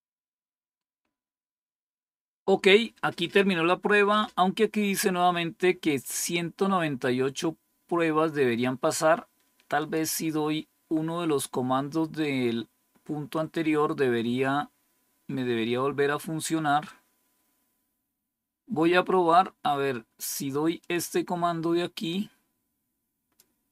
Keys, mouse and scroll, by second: 9.7 click, 13.4-14.0 scroll down 5, 14.6 scroll down 2, 15.4 scroll down 2, 16.1 scroll down 2, 16.9 scroll down 2, 20.7-23.3 drag.